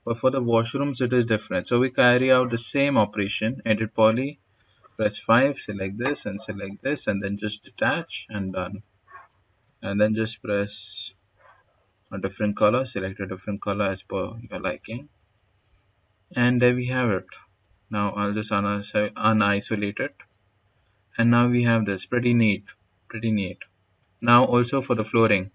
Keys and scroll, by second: 3.0 e, 3.3 d, 4.7 5.